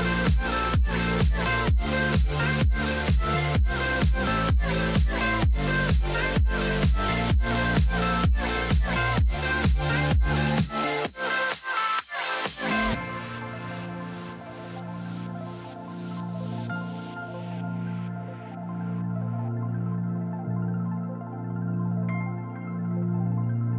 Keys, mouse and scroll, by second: 4.4 right click, 5.4-5.8 scroll down 1, 5.8 middle click, 7.1 right click, 8.7-9.6 scroll down 1, 10.1 right click, 10.2 scroll down 1, 10.5 middle click, 11.2-11.7 scroll down 1, 11.7 middle click, 13.7 middle click, 14.4 scroll down 1, 14.7 right click, 15.8-17.5 scroll down 1, 17.7 right click, 18.6 middle click, 20.3-20.6 scroll down 1, 21.2 middle click, 21.7 scroll down 1.